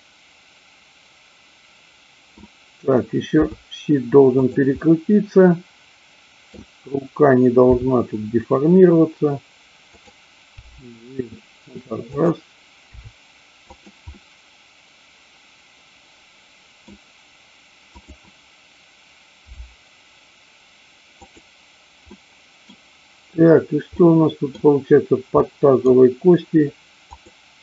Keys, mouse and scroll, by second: 3.4 r, 4.4 click, 4.8-6.5 middle drag, 7.7 r, 9.8 click, 10.6 g, 12.1 click, 13.0 r, 13.7 click, 14.1-16.8 middle drag, 17.8-18.8 drag, 19.5 g, 21.2 click, 22.1-22.7 middle drag, 24.0 scroll up 1, 24.1 middle click, 25.4-26.0 scroll up 1.